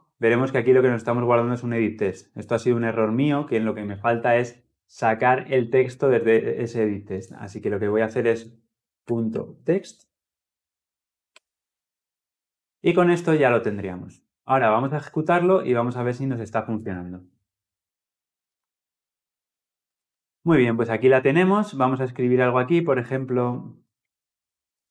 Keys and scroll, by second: 11.0 Return, 16.5 ctrl+alt+l, 16.6 ctrl+alt+o.